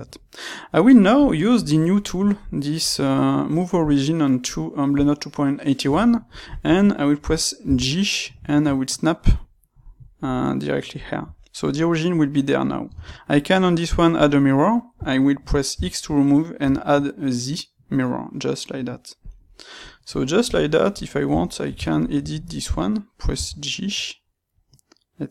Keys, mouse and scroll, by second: 2.1-4.5 drag, 7.6 g, 9.2-11.0 drag, 11.3-19.5 middle drag, 12.9 space, 14.2 space, 19.5 click, 20.0 middle click, 20.3 Tab, 21.8 ctrl+right click, 23.2 g.